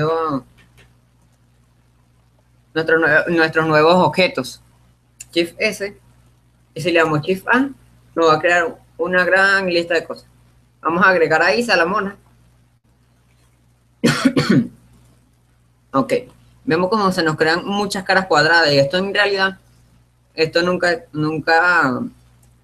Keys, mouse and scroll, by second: 1.6 shift+s, 7.5 shift+a, 16.1-19.5 middle drag, 16.1-17.2 scroll up 1, 17.2 scroll up 1.